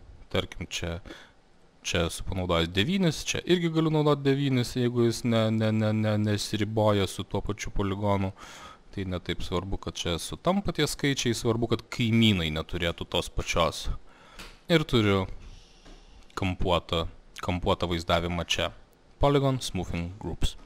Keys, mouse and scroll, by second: 0.7 click, 1.7 click, 3.5 click, 4.6 alt+middle click, 9.4 click, 10.4 click, 11.2 click, 13.3 click, 13.8 click, 14.2 click, 15.0 alt+middle click, 15.2 middle click, 15.2 scroll, 17.4 alt+middle click, 20.1 scroll.